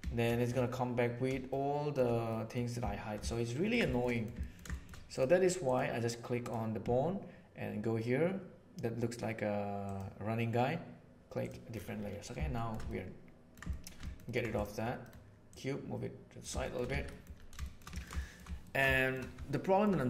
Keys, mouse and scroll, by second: 1.4-2.0 shift+middle drag, 2.4 middle click, 3.2-4.6 ctrl+middle drag, 4.8 shift+middle drag, 6.4 right click, 9.8 click, 12.5 shift+middle drag, 12.9-13.4 ctrl+middle drag, 13.6 shift+middle click, 14.0 ctrl+middle click, 15.5 middle click, 16.6 shift+middle click, 16.8 alt+a, 17.0-18.2 middle drag, 18.6 ctrl+middle click, 18.9-19.2 shift+middle drag, 19.6 middle click, 19.9 middle click.